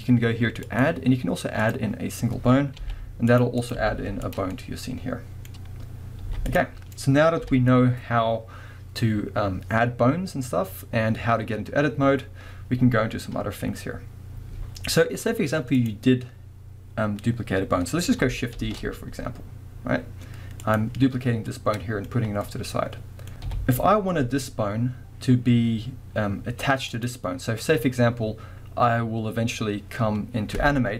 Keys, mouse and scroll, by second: 0.7-3.4 drag, 2.8 g, 3.6 click, 3.7 g, 4.4 click, 4.5-5.3 middle drag, 6.2-15.8 middle drag, 6.2 x, 7.4 KP_1, 13.7-15.8 scroll down 1, 15.8 click, 17.6-18.6 scroll up 1, 18.6 shift+d, 20.8 click, 21.5-22.7 middle drag, 23.5 KP_1, 26.0 scroll up 1, 26.9 click.